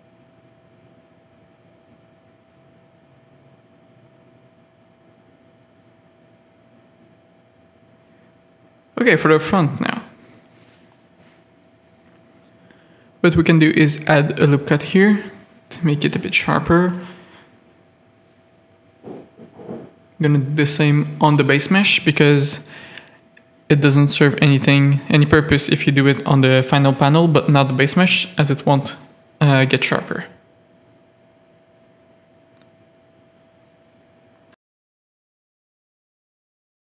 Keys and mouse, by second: 1.3 z, 2.4 shift+middle click, 3.0 z, 5.0 shift+middle click, 6.1-7.3 middle drag, 7.4 middle click, 8.0 middle click, 8.2 z, 8.5 middle click, 8.8 z, 9.6 z, 10.4 Tab, 11.1 ctrl+r, 12.9 Tab, 14.6 click, 16.2 click, 17.6 Tab, 18.1 ctrl+r, 23.4 Tab, 24.8 click, 25.7 click, 26.5 Tab, 26.8 click, 27.0 shift+click, 27.6-29.8 typing, 27.9 click, 28.7 click, 29.4 click, 31.7 click, 33.3 g, 34.7 g, 35.5 a, 35.8 middle click, 36.7 middle click.